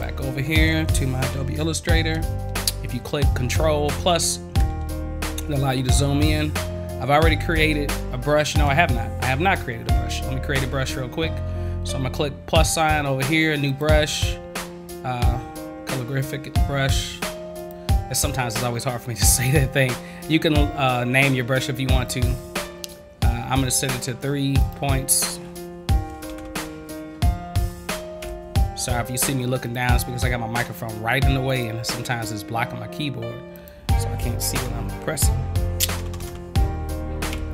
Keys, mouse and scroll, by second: 13.7 click, 17.6 click, 22.1 click, 24.6 click, 29.6 click, 31.5 click, 33.5 click.